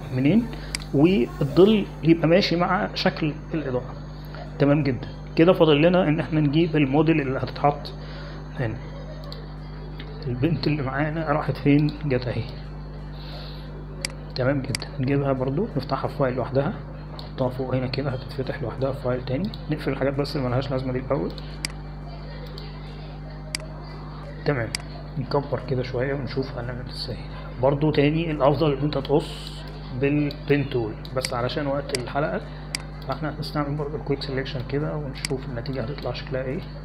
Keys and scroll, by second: 27.7 ctrl+=, 27.7 ctrl+=, 27.9 ctrl+=, 28.1 ctrl+=, 28.5 ctrl+=, 29.1 ctrl+=, 30.9 space.